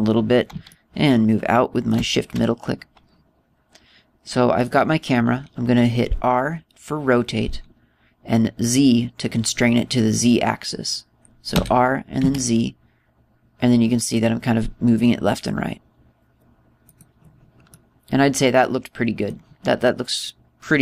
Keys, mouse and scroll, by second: 1.5 shift+middle click, 5.4 right click, 12.3 r, 17.8 click, 18.5 middle click, 20.6 middle click.